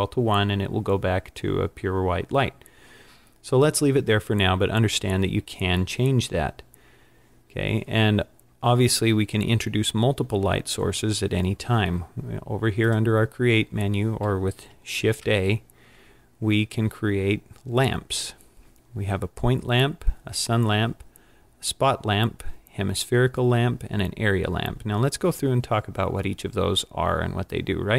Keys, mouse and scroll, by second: 12.9 click, 15.1 shift+a.